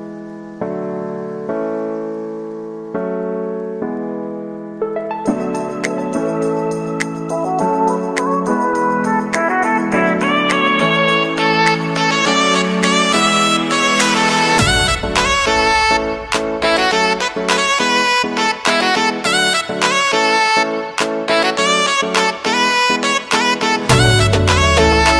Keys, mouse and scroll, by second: 0.6-2.0 drag, 3.0-6.0 drag, 6.0 KP_Enter, 6.8-7.3 scroll down 1, 8.4-11.4 drag, 11.8-13.6 drag, 13.6 KP_Enter, 14.7 alt+a, 15.1 ctrl+s, 17.5-18.6 scroll down 1, 18.6-19.0 drag, 19.0-21.4 scroll down 1, 21.4 click.